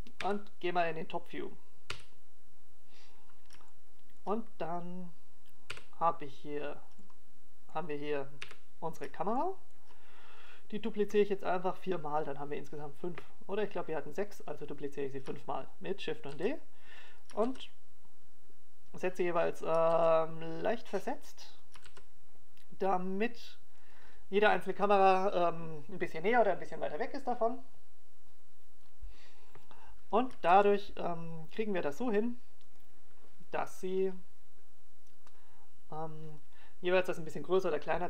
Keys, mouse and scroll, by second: 2.0 KP_7, 4.1 KP_5, 5.7 shift+middle click, 6.3-7.1 scroll down 1, 7.6 KP_5, 8.4-8.8 scroll down 1, 8.8 middle click, 10.3 KP_7, 11.2 shift+middle click, 12.3 right click, 18.2 shift+d, 19.2 click, 19.4 shift+d, 21.6 click, 21.9 shift+d, 23.6 click, 23.9 shift+d, 25.9 click, 32.5 shift+d, 34.8 click.